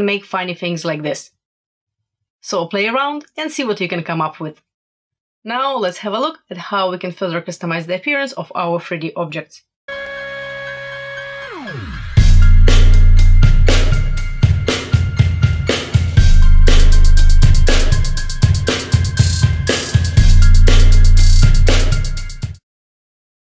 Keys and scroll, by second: 0.2 shift+super+e.